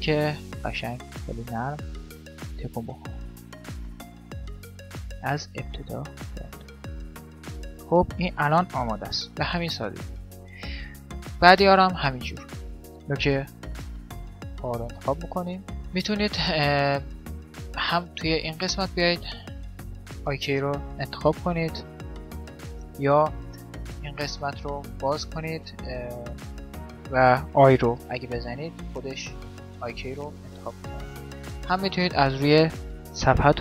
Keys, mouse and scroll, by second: 1.1 middle click, 1.9-3.9 drag, 3.9 middle click, 4.4-6.0 right drag, 7.2-10.0 middle drag, 9.3 g, 12.0-14.2 middle drag, 12.8 right click, 18.6-20.3 drag, 24.7-28.4 drag, 30.7-32.8 drag.